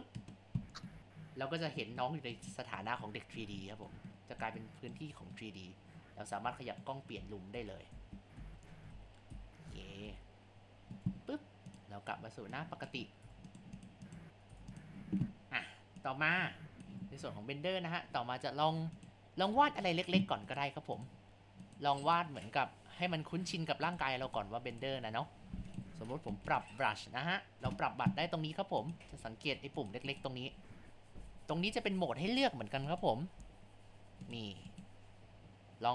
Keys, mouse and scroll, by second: 12.8 click, 13.2 Tab, 14.1 click, 14.5 Tab, 16.0-19.1 drag, 20.5 click, 21.7 click, 22.1-22.6 drag, 23.9 click, 24.3 click, 25.7-28.7 drag, 29.8 click, 30.1 click, 31.7 scroll down 1, 32.9 click, 34.3-34.6 drag, 34.7 click.